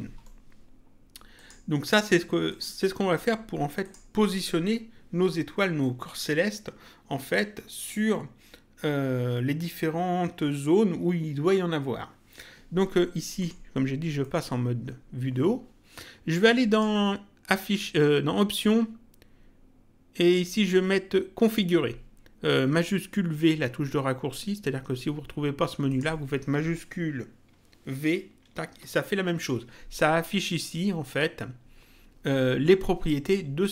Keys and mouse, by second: 1.3 click, 2.5 click, 3.8 click, 13.4 middle click, 16.7 click, 25.9 click, 28.5 shift+v.